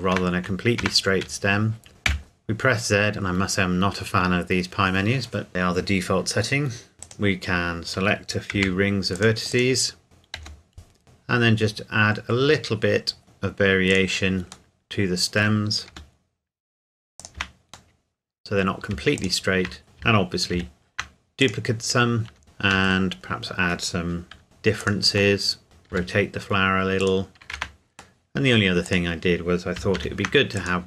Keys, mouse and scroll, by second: 0.2-0.8 scroll down 1, 0.8 Tab, 2.0 z, 6.9 click, 7.0 right click, 7.5-8.6 scroll down 1, 8.6 c, 9.2 click, 9.5 right click, 10.4 g, 11.0-12.5 scroll up 1, 12.5 scroll down 1, 12.7-13.2 scroll up 1, 13.2-13.9 scroll down 1, 13.9 click, 14.7 middle click, 15.9 g, 17.2 click, 17.4 Tab, 17.9 middle click, 19.2 shift+click, 19.8 scroll down 2, 20.6 shift+d, 21.4 click, 22.3 Tab, 22.6 shift+middle click, 23.4 middle click, 24.4 s, 24.8 click, 25.4 middle click, 25.9 r, 27.0 click, 27.6 Tab, 28.2 middle click, 28.9 click, 30.0 shift+d, 30.6 click.